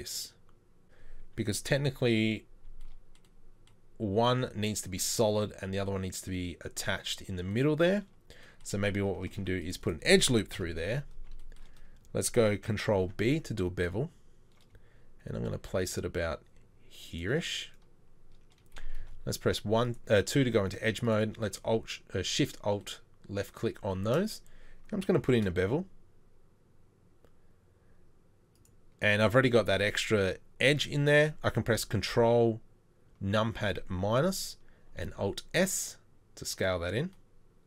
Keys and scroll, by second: 1.7 KP_3, 9.3 ctrl+r, 10.5 KP_7, 13.0 ctrl+b, 19.0 2, 25.2 ctrl+b, 35.0 alt+s.